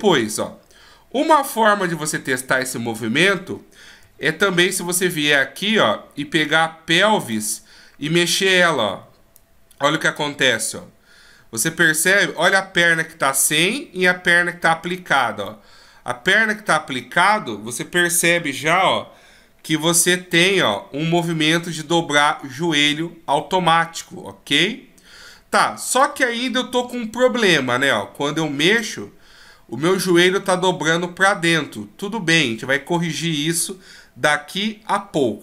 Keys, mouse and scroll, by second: 2.4 middle click, 4.0 KP_1, 4.9-5.6 shift+scroll up 1, 5.6 middle click, 9.3 click, 15.5 click, 26.8 KP_1, 28.6 click.